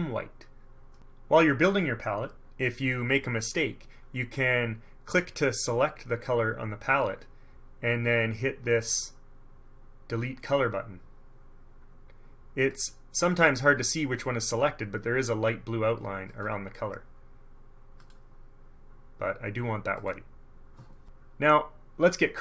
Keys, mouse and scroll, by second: 5.3 click, 12.9 click, 16.5 click, 18.2 click, 20.1 click.